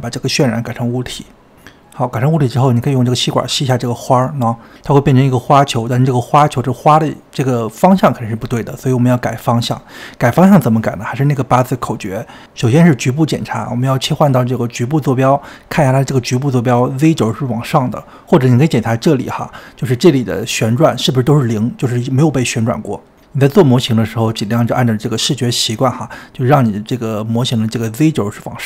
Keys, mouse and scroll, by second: 1.8 click, 4.2-4.9 scroll up 4, 4.9-9.4 middle drag, 9.4-10.0 scroll down 2, 10.0-11.3 shift+middle drag, 11.3 click, 12.3-19.2 shift+middle drag, 19.2 click, 25.4 KP_1.